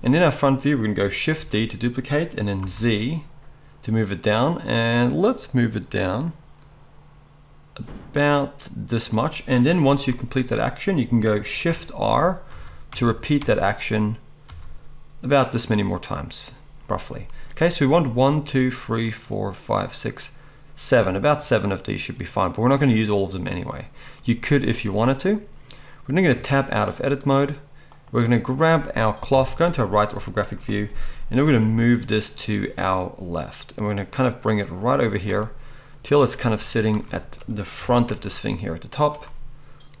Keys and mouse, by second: 1.3 shift+d, 8.2 middle click, 9.0-21.0 right drag, 12.0 shift+r, 12.5 shift+r, 12.9 shift+r, 13.4 shift+r, 14.5 shift+r, 21.0-23.8 middle drag, 23.8 right click, 24.2-26.8 middle drag, 26.3 Tab, 26.8-27.8 drag, 27.8-40.0 right drag, 29.3 KP_3, 31.7 g, 36.5 z, 37.8 g.